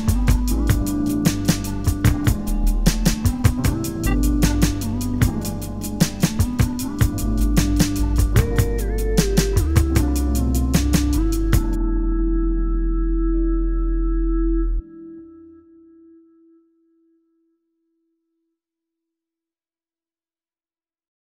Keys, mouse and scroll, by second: 0.3 scroll up 1, 1.1 scroll down 2, 1.2 `, 1.8 scroll up 2, 2.0 `, 2.6 1, 3.0 click, 3.3 shift+click, 3.8 j, 4.2 alt+a, 4.4 click, 5.0 alt+a, 5.7 k, 7.6-10.2 typing, 7.8 click, 10.8 alt+a, 11.8 ctrl+r, 13.4 ctrl+r, 14.2 scroll down 2, 14.8 Tab, 15.2 scroll up 2, 16.9 click, 19.2 scroll up 1, 19.4 alt+a, 19.9 `.